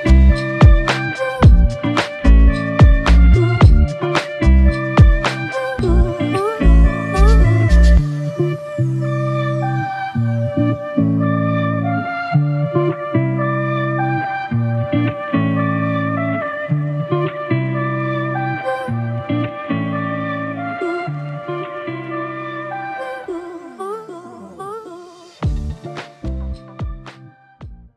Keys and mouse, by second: 3.3 typing, 4.5 double click, 5.1 alt+click, 6.2 double click, 8.7 shift+click, 10.8 ctrl+alt+click, 11.7 alt+click, 15.3 ctrl+alt+click, 16.2 g, 17.8 typing, 18.8 alt+click, 20.2 double click, 23.9 shift+click, 24.0 shift+double click, 24.2 shift+click, 25.5 alt+click.